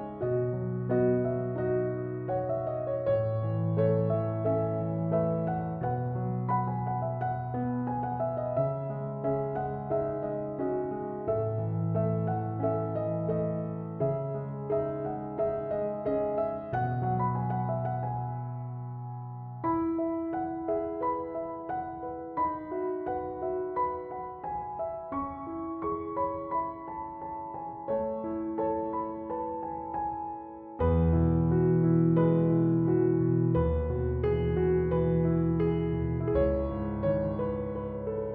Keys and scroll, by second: 17.0 ctrl+z.